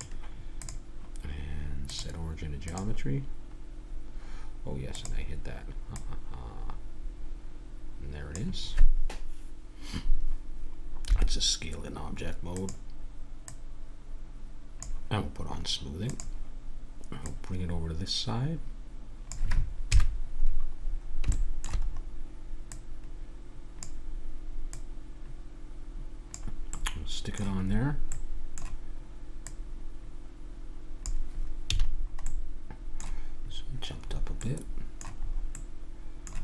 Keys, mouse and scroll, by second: 3.8-4.9 middle drag, 4.9-7.9 drag, 11.1 s, 13.4-15.2 drag, 16.0-19.1 drag, 19.8 KP_7, 20.8 middle click, 22.6-24.5 drag, 24.7-26.5 drag, 26.8-29.4 middle drag, 29.4 right click, 30.0-31.2 drag, 31.6 a, 32.2-34.0 middle drag, 34.6 middle click, 35.2-36.4 middle drag.